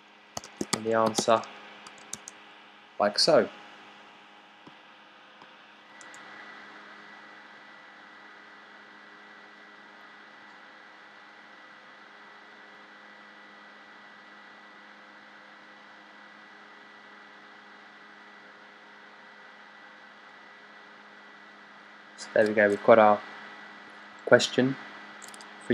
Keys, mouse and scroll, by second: 0.0-2.1 typing.